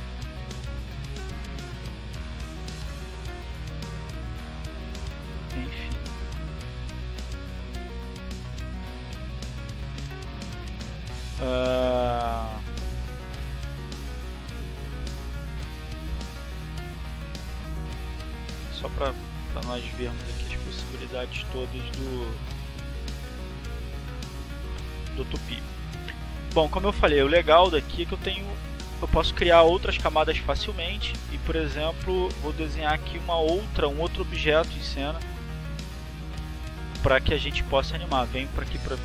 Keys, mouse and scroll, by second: 0.1 click, 2.0-3.5 drag, 3.6 click, 4.6-7.7 drag, 9.0 click, 10.8 click, 11.5 click, 11.9 click, 12.4 click, 13.2-15.2 drag, 16.1 click, 17.6 click, 19.0 click, 20.1-21.3 drag, 22.1 click, 23.4 click, 24.3 click, 26.4 click, 27.8 click, 28.8 click, 30.7 click, 33.3 click, 38.0 click.